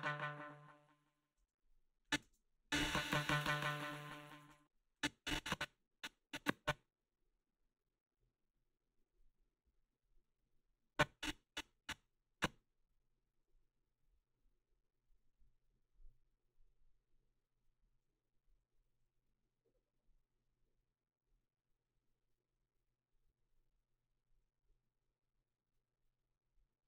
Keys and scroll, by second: 1.4 space, 2.2 space, 4.4 space.